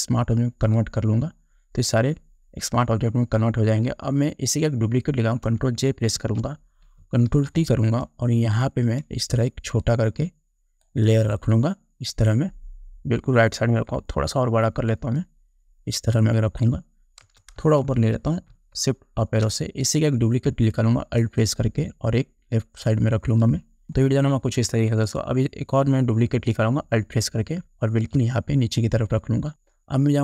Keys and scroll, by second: 6.3 ctrl+j, 7.5 ctrl+t, 17.4 Return, 18.7 shift+Up.